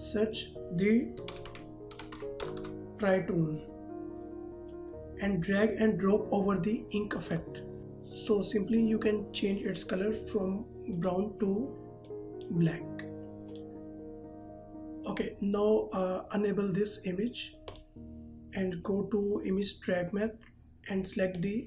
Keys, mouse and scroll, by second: 0.0 click, 1.4-2.8 typing, 4.9 click, 11.0 click, 12.3 click, 17.8 click, 21.4 click.